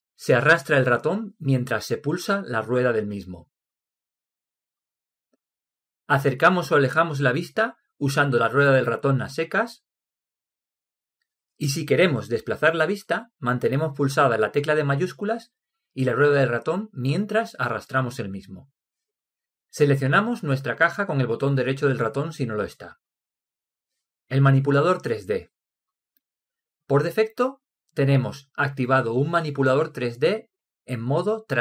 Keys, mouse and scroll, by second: 1.9-3.9 middle drag, 6.2-10.9 middle drag, 10.9-12.3 scroll up 1, 12.3-13.3 scroll up 1, 13.3 scroll down 1, 16.8-18.7 middle drag, 21.5-24.2 right drag.